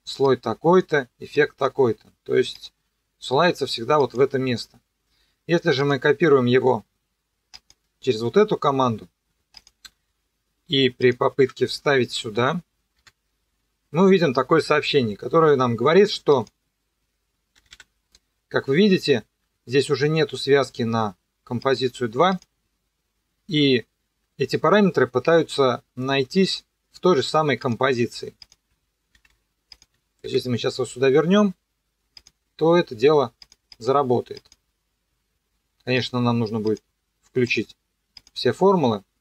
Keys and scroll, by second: 11.4 Delete, 12.9 ctrl+v, 17.5 e, 29.1 ctrl+c, 30.3 ctrl+v.